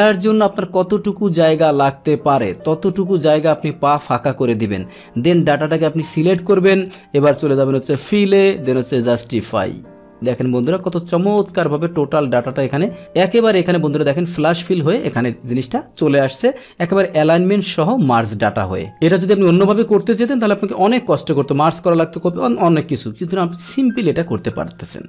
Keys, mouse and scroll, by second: 2.5 click, 3.2-4.7 drag, 5.7-6.8 drag, 7.9 click, 9.3 click, 10.3 click, 11.0-12.5 drag, 13.0-14.6 drag, 19.7-20.7 drag, 21.2 click, 22.3 click.